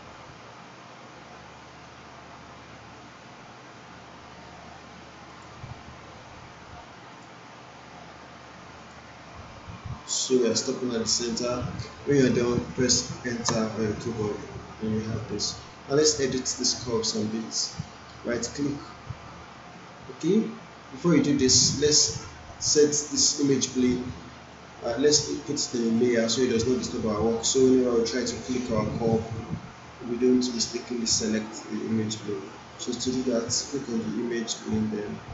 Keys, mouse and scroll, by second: 5.3 click, 13.5 Return, 18.7-21.7 right drag, 22.5 click, 25.9 click, 29.1 click, 33.9 click.